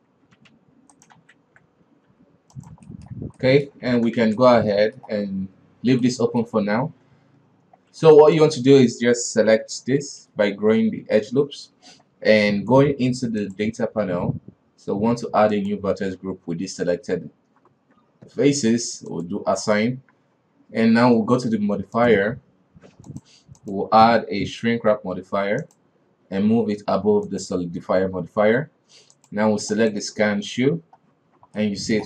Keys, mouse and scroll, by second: 0.5 f, 0.7 g, 1.3 ctrl+z, 2.2 g, 3.0-4.0 shift+middle drag, 4.0 alt+a, 4.3 shift+z, 4.6-6.8 middle drag, 6.8 scroll down 3, 7.2 KP_3, 8.3 alt+right click, 9.7 ctrl+KP_Add, 10.3 ctrl+KP_Add, 10.8 ctrl+KP_Add, 13.6 drag, 15.7 click, 19.3 click, 20.1 Tab, 22.1 click, 23.2 click, 23.8-26.8 drag, 27.4 click, 29.3-30.6 drag, 30.6 scroll up 2, 31.8-32.0 middle drag.